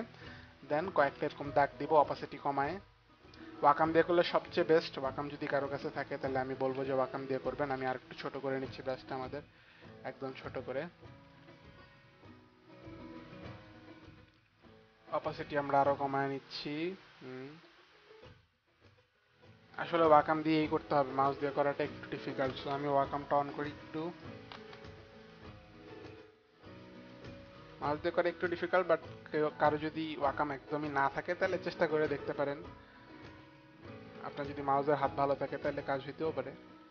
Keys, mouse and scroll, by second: 0.5 click, 1.3 ctrl+z, 2.7 ctrl+z, 2.7 click, 4.5 click, 6.1 click, 6.9 ctrl+z, 9.9 ctrl+z, 9.9 click, 11.5 ctrl+z, 11.5 click, 13.7 click, 14.6 z, 15.8 click, 16.6 click, 17.7 click, 18.4 click, 20.0 ctrl+z, 33.8 click, 34.5 click.